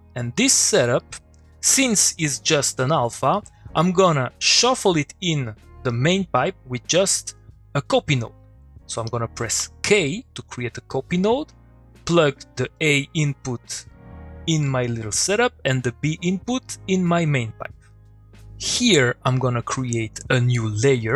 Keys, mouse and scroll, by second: 0.0-0.3 click, 0.4 middle click, 0.8 click, 1.0 middle click, 3.8 middle click, 9.0 click, 9.6 k, 10.0 middle click, 14.9 middle click, 15.6-16.6 click, 16.6 middle click, 18.5-20.0 click.